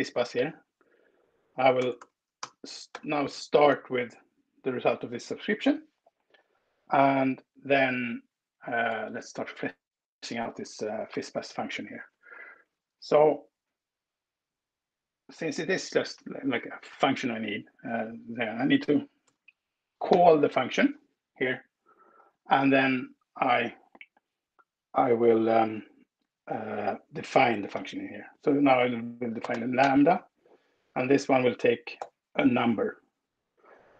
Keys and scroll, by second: 0.1 Left, 1.7 BackSpace, 2.7 space, 8.5 Down, 8.7 Left, 8.9 Left, 9.1 Left, 11.4 ctrl+w, 18.9 BackSpace, 19.9 shift+8, 27.5 shift+8, 29.3 fn+space, 30.7 alt+8, 31.7 n.